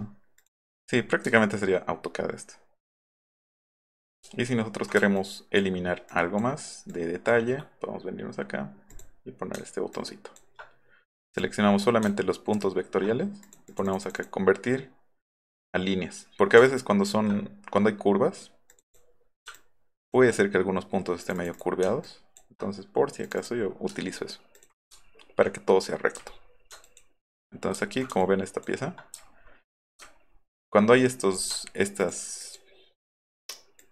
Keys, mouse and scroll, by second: 0.4 click, 1.3 alt+middle click, 2.1 alt+middle click, 3.2 alt+middle click, 3.8 click, 4.3 alt+middle click, 4.7 alt+middle click, 5.1 ctrl+click, 6.1 ctrl+click, 6.9 ctrl+click, 8.9 click, 9.9 ctrl+click, 11.3 click, 12.1 ctrl+click, 13.5 click, 13.7 click, 13.9 click, 14.1 click, 18.7 click, 19.5 ctrl+click, 21.2 click, 21.6 click, 22.0 ctrl+click, 23.2 click, 24.1 alt+middle click, 24.6 alt+click, 24.9 alt+middle click, 25.0 alt+scroll up 1, 26.1-26.6 scroll up 2, 26.8 ctrl+click, 27.8 alt+scroll up 1, 28.2 ctrl+click, 29.2 alt+middle click, 29.5 alt+middle click, 29.7 alt+middle click, 30.0 alt+middle click, 30.3 alt+middle drag, 30.9 alt+middle click, 31.1 alt+middle click, 32.0 ctrl+click, 32.4 ctrl+click, 33.8 ctrl+click.